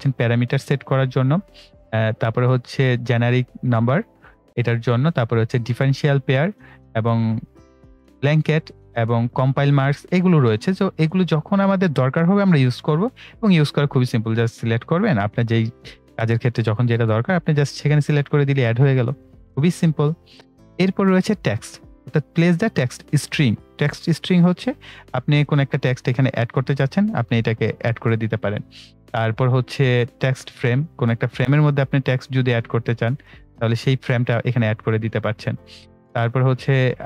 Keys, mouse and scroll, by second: 31.4 click, 34.8 right click, 36.9-37.0 drag.